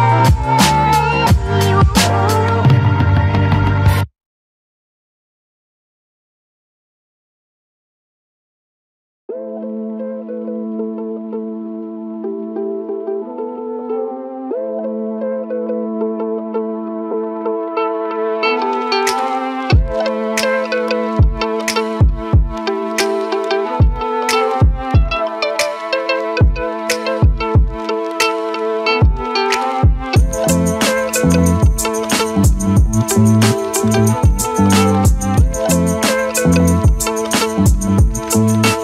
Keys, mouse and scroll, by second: 0.2 f, 0.3 click, 0.6 click, 1.0 shift+click, 1.3 shift+click, 1.6 f, 1.8 click, 1.9 click, 2.3 g, 3.7 click, 5.0 click, 5.3 f, 7.1 click, 7.9 shift+click, 8.2 shift+click, 8.6 f, 8.7 click, 8.9 alt+middle click, 9.1 click, 9.5 e, 11.1 click, 11.7 shift+click, 11.9 shift+click, 12.4 ctrl+click, 12.7 f, 13.0 scroll down 1, 13.3 click, 13.6 scroll up 4, 13.9 alt+middle click, 14.2 ctrl+click, 15.2 ctrl+click, 15.6 shift+click, 15.8 alt+middle click, 16.1 ctrl+click, 16.5 ctrl+click, 17.1 alt+middle click, 17.3 ctrl+click, 17.6 alt+middle click, 18.0 ctrl+click, 18.3 ctrl+click, 18.7 ctrl+click, 18.9 alt+middle click, 19.4 alt+middle click, 19.9 shift+click, 20.9 alt+middle click, 22.4-22.7 scroll down 4, 24.0 alt+click, 24.7 e, 26.1 click, 26.5 click, 27.9 Tab, 28.0-28.8 alt+drag, 29.1 ctrl+z, 29.5-30.2 alt+drag, 30.2 ctrl+z, 30.5-31.2 alt+drag, 31.4 alt+middle drag, 31.6-32.0 alt+drag, 32.3 alt+middle click, 32.6 ctrl+click, 32.8 ctrl+click, 33.4 ctrl+click, 33.8-34.1 alt+drag, 34.1 alt+right drag, 34.3-34.9 alt+drag, 34.9 e, 35.8 alt+click, 37.1 click, 37.4 shift+click, 37.6 shift+click, 37.9 shift+click, 38.1 shift+click, 38.4 shift+click, 38.7 shift+click.